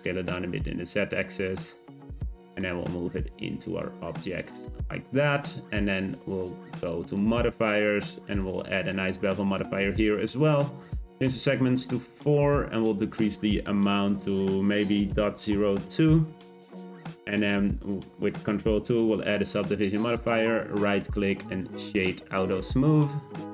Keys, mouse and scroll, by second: 0.1 Tab, 2.2 middle click, 2.5 g, 4.6-5.0 middle drag, 5.0-7.0 scroll up 1, 8.3 click, 8.7-9.1 shift+middle drag, 9.1-9.6 scroll up 3, 9.6-10.7 shift+middle drag, 10.7-12.9 drag, 14.0-17.1 drag, 17.4 click, 17.8 click, 18.9 ctrl+2, 20.1-21.9 right drag, 21.9 click, 22.2-22.6 scroll down 2, 22.6-23.5 middle drag.